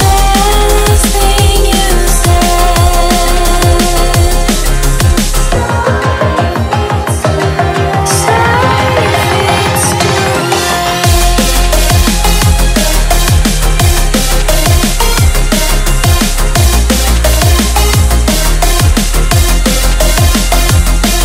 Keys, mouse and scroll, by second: 0.3 click, 0.4 s, 1.3 click, 1.5 e, 2.4 r, 3.4 click, 4.1 e, 5.1 r, 5.8 e, 6.4 r, 7.2 g, 9.8-10.9 shift+middle drag, 12.0 r, 15.7 click, 16.5 click, 17.8 e, 18.2 v, 20.3-21.2 drag.